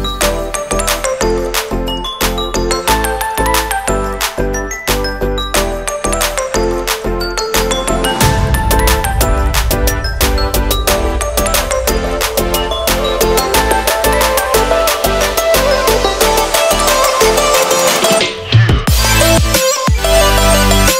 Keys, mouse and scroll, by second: 0.5 scroll down 1, 0.7 click, 1.1 g, 1.8 shift+middle click, 3.1 click, 3.8 click, 5.0 click, 6.2 click, 8.1 click, 10.6-11.4 scroll up 5, 11.6 click, 11.6-12.0 scroll up 2, 12.0 click, 12.1 g, 13.1-13.5 scroll up 3, 13.4 middle click, 15.1 shift+middle click, 15.5 middle click, 16.8 click, 17.1 g, 17.6 shift+a.